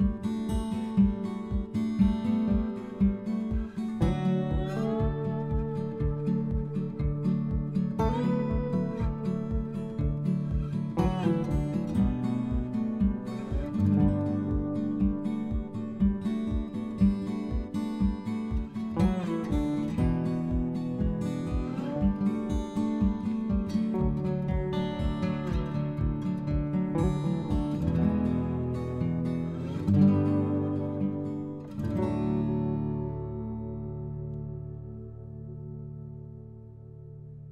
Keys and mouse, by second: 0.2 middle click, 2.0 middle click, 2.8 click, 3.9 click, 5.0 r, 6.3 click, 7.4 click, 8.2 click, 8.7 click, 9.0 middle click, 9.0 r, 10.5 middle click, 11.3 click, 12.1 click, 13.0 click, 13.8 middle click, 15.0 middle click, 16.6 shift+g, 17.8 click, 18.2 s, 19.9 click, 20.4 e, 21.6 click, 21.8 r, 22.8 click, 22.9 s, 24.2 click, 24.9 r, 26.2 click, 26.9 click, 27.6 s, 29.5 click, 30.0 click, 30.4 g, 32.4 click, 32.8 click, 33.4 click, 34.0 click, 34.6 g, 34.9 z, 35.6 click, 35.9 click, 36.3 click, 36.7 g.